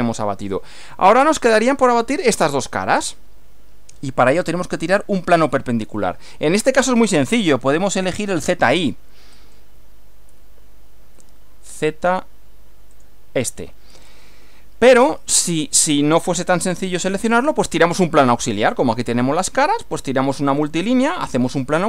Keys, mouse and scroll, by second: 0.5 click, 0.9-1.8 middle drag, 3.1-4.4 middle drag, 9.3 click, 12.9 click.